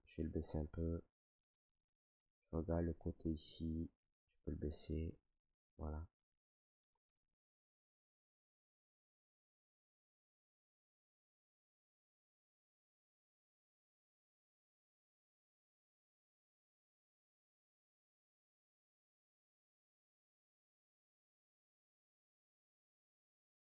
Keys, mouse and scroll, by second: 0.4 click, 1.5 right click, 2.7 alt+right click, 4.3 click, 5.6 click, 6.2 alt+right click, 7.3 click, 7.5 alt+right click, 8.1 click, 8.3 alt+right click, 8.9 click, 9.3 click, 9.3 right click, 9.9 click, 9.9 right click, 10.4 click, 10.4 right click, 10.8 right click, 10.8 click, 11.2 click, 11.2 right click, 11.4 ctrl+click, 11.6 alt+right click, 11.8 right click, 12.0 ctrl+right click, 12.7 right click, 13.1 right click, 13.5 click, 14.1 click, 14.4 right click, 14.6 ctrl+right click, 14.8 alt+right click, 15.1 s, 15.5 click, 15.7 click, 16.7 click, 16.9 click, 17.1 right click, 17.5 click, 17.7 right click, 18.6 click, 18.8 right click, 19.0 alt+right click, 19.3 right click, 20.1 click, 20.8 click, 21.1 click, 21.6 right click, 22.4 click, 22.6 right click, 22.8 alt+right click, 23.0 right click, 23.3 right click, 23.3 alt+right click.